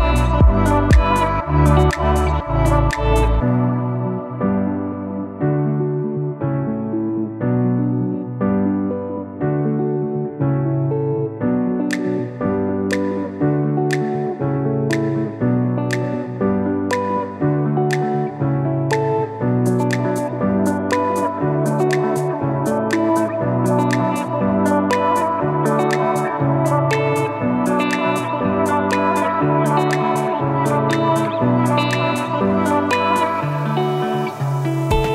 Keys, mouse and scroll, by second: 3.8 i, 5.6 shift+click, 16.0 Up, 17.7 click, 18.4 Up, 20.6 click, 21.5 Up, 22.6 shift+Up, 23.7 Down, 27.2 shift+Up, 29.4 shift+Down, 30.0 Up, 31.5 Down, 32.8 Up, 33.7 Down.